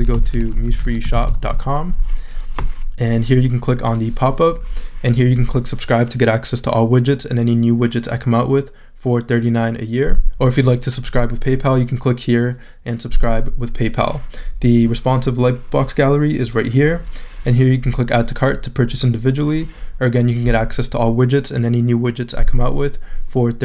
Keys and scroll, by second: 0.0-1.8 typing.